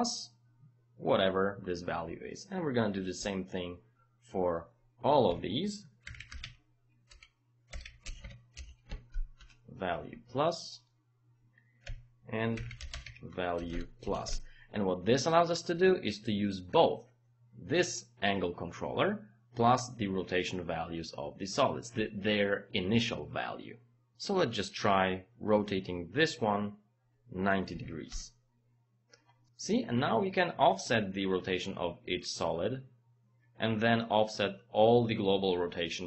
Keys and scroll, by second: 3.2 Return, 5.3 Home, 5.8-8.3 typing, 9.4 Return, 11.9 Home, 12.3-13.5 typing, 13.7 KP_Add, 14.3 Return, 27.7 KP_9, 27.9 KP_0, 28.1 Return.